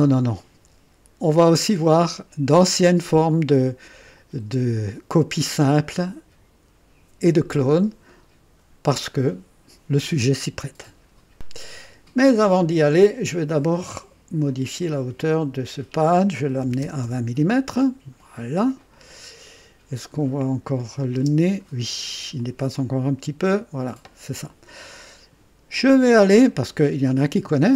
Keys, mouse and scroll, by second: 11.3 click, 13.3-13.7 scroll up 1, 14.4 click, 16.6 KP_2, 16.8 KP_0, 17.0 KP_Enter, 18.8 click, 20.8 click, 21.1 space, 22.3 click.